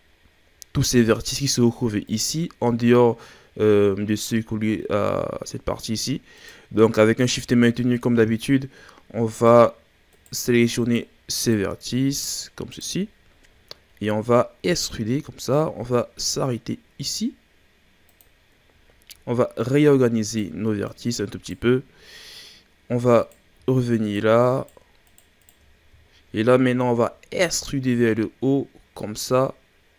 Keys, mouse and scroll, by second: 2.0 right click, 6.4 right click, 7.9 right click, 10.1 right click, 10.8 shift+right click, 11.4 shift+right click, 12.2 shift+right click, 12.7 shift+right click, 13.0-13.3 scroll down 4, 13.3-14.6 ctrl+scroll up 5, 14.6 e, 18.7-19.0 ctrl+scroll down 2, 19.0-19.5 scroll up 1, 19.5 right click, 20.9 right click, 21.9 scroll down 1, 23.2 right click, 24.0 shift+right click, 24.5 shift+right click, 25.0 shift+right click, 25.4 shift+right click, 25.6-26.1 scroll down 4, 26.1-27.0 shift+scroll up 6, 27.3 e.